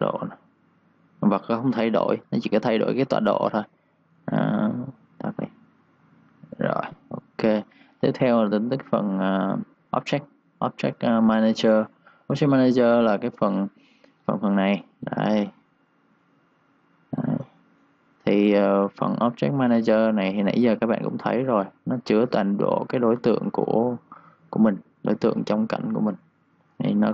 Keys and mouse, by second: 4.2 ctrl+z, 4.9 click, 5.7-6.5 typing, 5.8 click, 13.5 ctrl+shift+d, 19.1 Escape, 20.0 click, 24.9-25.8 typing, 25.0 click, 26.0 click.